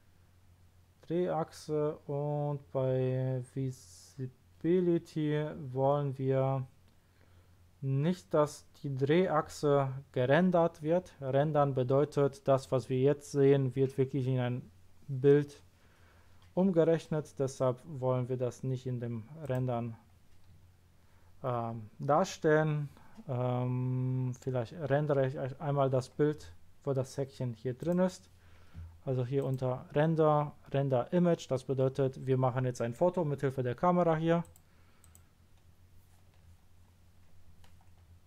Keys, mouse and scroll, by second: 0.1 scroll down 1, 0.6-1.3 scroll down 1, 1.5 scroll down 1, 2.1-3.2 scroll down 2, 19.4 click, 27.8 click, 29.4 click, 34.4 click, 35.0 click.